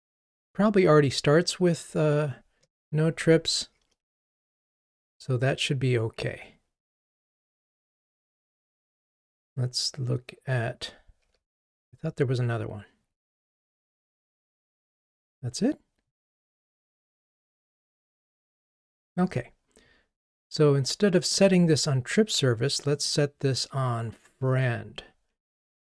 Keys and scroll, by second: 7.7 ctrl+g, 15.3 Escape.